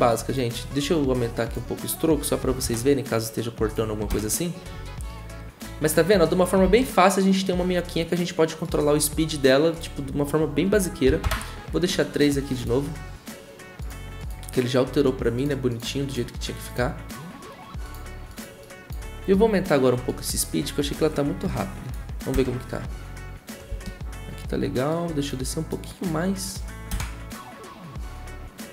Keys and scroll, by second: 2.4 5, 2.6 Return, 4.1 0, 11.0 3, 11.2 Return, 22.3 0, 23.7 Return.